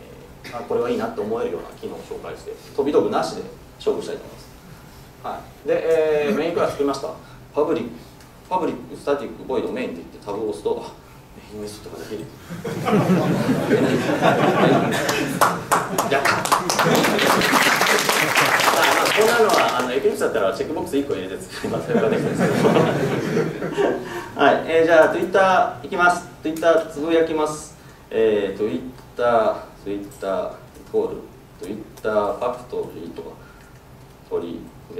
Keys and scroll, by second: 10.4 Tab.